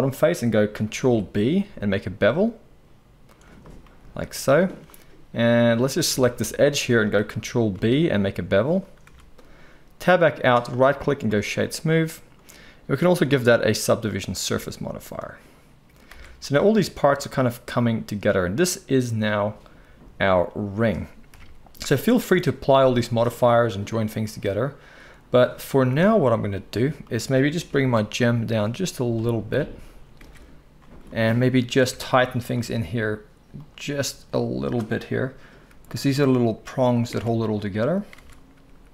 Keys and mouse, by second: 1.0 ctrl+b, 5.6-6.6 drag, 6.1 alt+a, 6.6-10.5 alt+shift+middle drag, 7.7 ctrl+b, 9.0 Tab, 10.7-16.9 right drag, 13.0-16.9 drag, 13.0-27.1 middle drag, 16.1 alt+a, 21.3 KP_1, 25.0-25.8 drag, 25.0-25.8 right drag, 27.1-30.4 right drag, 27.7 g, 30.2 alt+a, 30.4-36.9 drag, 31.8 Tab, 32.1 z, 33.7-38.9 right drag, 35.7 g, 37.1 Tab, 38.2 Tab, 38.6 g.